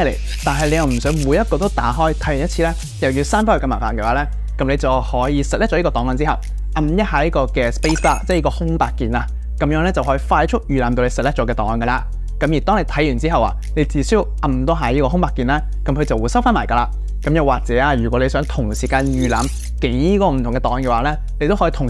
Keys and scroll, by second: 8.4 space, 10.2 Page_Down, 12.4 space, 15.9 space, 18.9 space.